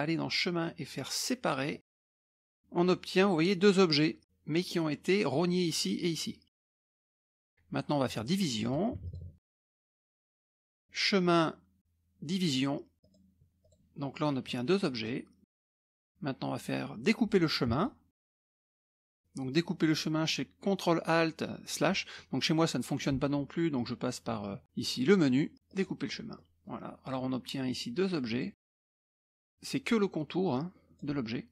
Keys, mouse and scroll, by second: 1.7 click, 2.0 click, 2.4-4.0 drag, 4.2 click, 6.6 click, 7.3 middle click, 8.6 click, 9.0 shift+click, 9.5 click, 9.6 space, 10.8 click, 13.0 click, 13.8 click, 14.5 click, 15.4 click, 17.8 click, 18.2 shift+click, 18.4 click, 18.4 space, 19.1-20.0 scroll down 1, 22.2 middle click, 22.2 scroll up 1, 22.4-23.4 scroll down 1, 23.8 click, 25.7 click, 26.4 middle click, 26.4-27.0 scroll up 1, 27.0 click, 27.7-28.7 drag, 29.4-31.3 drag.